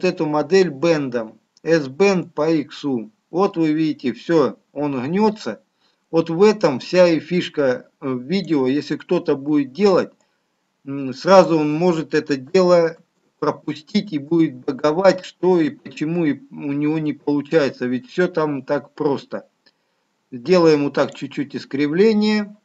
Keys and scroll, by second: 12.8 ctrl+z.